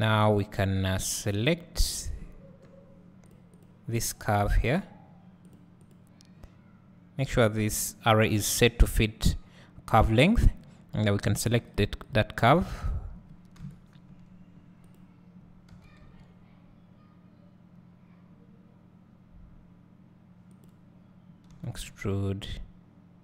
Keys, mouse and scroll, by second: 0.4 click, 2.7-3.4 scroll down 2, 3.4 click, 3.7 click, 4.1 click, 4.6 click, 5.6 click, 11.5 click, 11.8 click, 12.2 click, 12.6 click, 13.6 KP_7, 14.8-15.8 drag, 15.8 g.